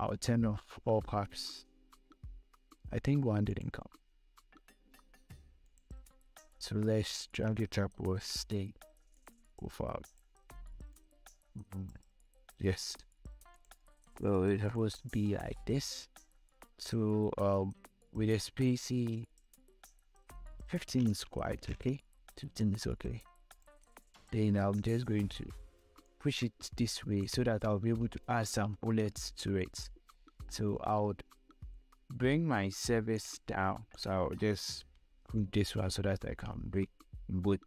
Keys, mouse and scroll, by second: 3.8 click, 6.0 ctrl+click, 6.8-13.8 shift+drag, 14.4 scroll up 2, 15.0 space, 15.1 click, 15.5 space, 19.4 scroll down 1, 20.8 click, 22.9-26.4 shift+drag, 26.4-28.4 shift+drag, 28.4 scroll down 1, 30.1 scroll up 1, 33.5 click, 34.2 ctrl+shift+click, 34.8 ctrl+g, 36.1-37.6 shift+drag.